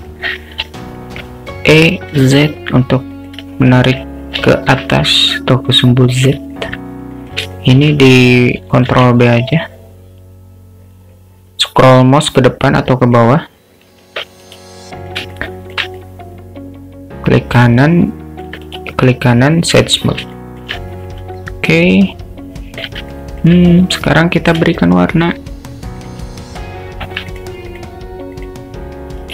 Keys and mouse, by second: 0.0 click, 0.8 alt+middle click, 1.8 e, 3.7 alt+middle click, 4.6 shift+middle click, 5.3-6.4 drag, 6.6 alt+middle click, 7.2 click, 7.5 alt+shift+middle click, 8.9 ctrl+b, 14.1 Tab, 14.6 right click, 15.4-15.8 alt+shift+middle drag, 16.0-18.5 alt+middle drag, 18.8-19.8 right drag, 20.4 shift+middle click, 21.4-22.9 alt+middle drag, 23.1 alt+middle click, 25.1 click, 25.2-29.3 alt+shift+middle drag.